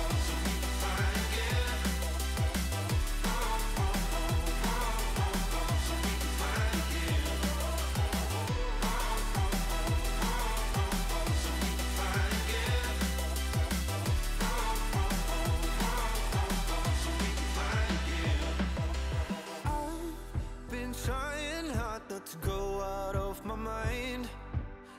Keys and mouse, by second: 1.1 click, 1.8 click, 2.2 click, 2.7 click, 3.8 click, 4.4 click, 4.7 click, 6.8 click, 8.1 click, 10.0 click, 11.0 click, 11.9 click, 14.5 click, 15.0 space, 15.0 click, 15.4 space, 16.1 click, 17.9 click, 18.3 shift+click, 18.4 shift+click, 19.0 shift+click, 19.6 space, 19.8 click, 20.4 shift+click, 21.0 shift+click, 21.6 click, 22.2 Return, 22.6 click, 23.4 click, 23.6 ctrl+z, 24.1 click, 24.6 click.